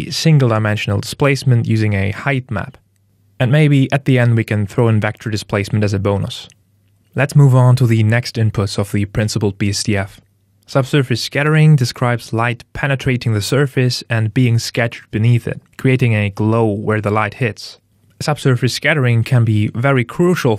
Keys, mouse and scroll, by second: 0.7 middle click, 2.0 click, 10.4 middle click, 11.7 scroll up 3, 18.8 middle click.